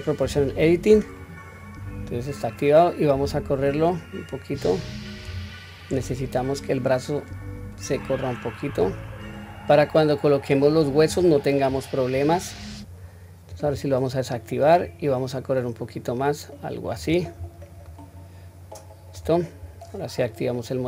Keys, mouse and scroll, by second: 0.2 o, 3.3 click, 3.4-11.1 drag, 13.5 click, 14.8 click, 17.3-17.8 scroll down 1, 17.8-19.2 middle drag, 19.4-20.4 scroll down 1.